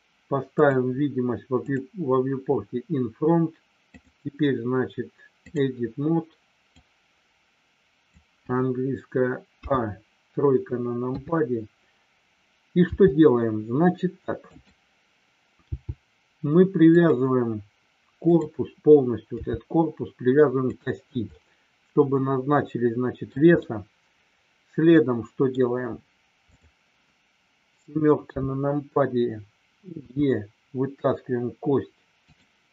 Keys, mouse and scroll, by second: 1.6 click, 4.0-5.6 drag, 6.8-8.0 drag, 11.0 KP_3, 12.9 r, 14.4 click, 16.9 click, 18.2 click, 20.5 click, 21.3 scroll up 1, 21.4-23.3 middle drag, 23.5 scroll up 1, 23.6-25.5 middle drag, 26.5 click, 28.2 KP_7, 30.0 e, 32.3 click.